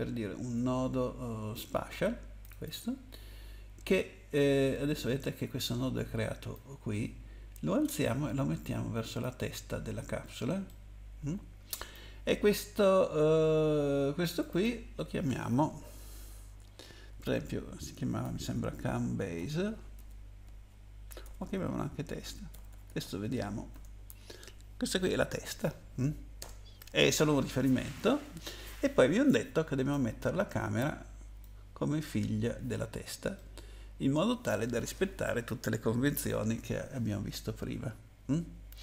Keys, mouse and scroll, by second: 2.4 click, 2.6 click, 2.7 double click, 4.3-5.6 scroll up 3, 6.5 click, 9.8-10.4 scroll down 2, 10.7 middle click, 10.7-11.0 scroll down 1, 14.3 click, 14.5 click, 14.6 double click, 17.2-19.9 typing, 21.2-24.2 typing, 26.4 Return, 29.9 click, 33.4 middle click.